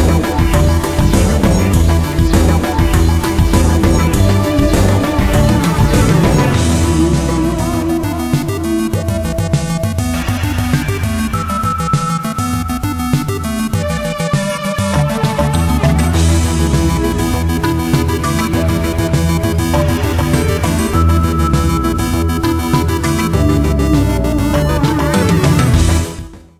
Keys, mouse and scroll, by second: 0.6 Tab, 0.8 middle click, 2.0-8.2 drag, 8.2 middle click, 8.5-9.0 scroll down 1, 9.0 middle click, 9.6 scroll down 1, 9.8 middle click, 10.1-10.4 scroll up 1, 10.4 Tab, 11.1 middle click, 12.8 scroll down 1, 13.1 middle click, 13.3-13.7 scroll up 1, 13.7 middle click, 14.3 KP_Decimal, 15.1 right click, 15.8 KP_Decimal, 16.5-17.5 middle drag, 17.9 click, 18.2 middle click, 18.5-18.9 scroll down 1, 18.9-25.6 middle drag.